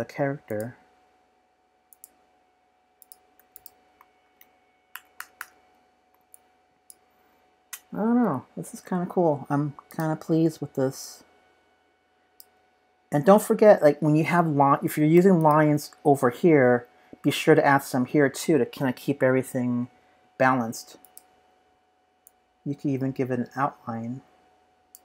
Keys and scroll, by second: 4.0 space, 4.9 super+-, 5.2 super+-, 5.4 super+-, 8.2 p.